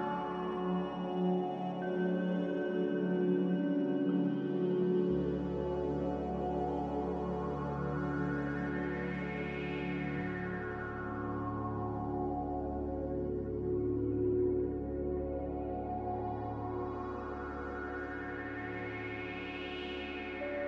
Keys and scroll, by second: 3.9 typing, 9.5 typing, 13.5 z.